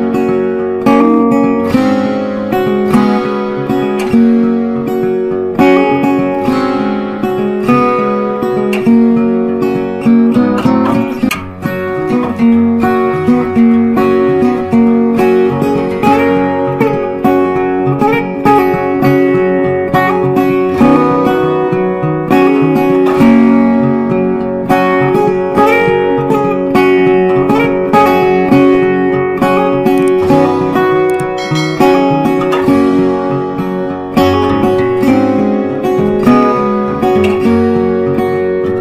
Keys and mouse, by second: 0.5 click, 1.4 Left, 3.1-11.3 drag, 11.3 right click, 13.1 click, 13.9 ctrl+a, 14.4-18.3 typing, 19.9-25.3 drag, 28.2 c, 29.2 click, 29.6 F4, 30.3 click, 35.0 Up, 36.7-38.8 drag.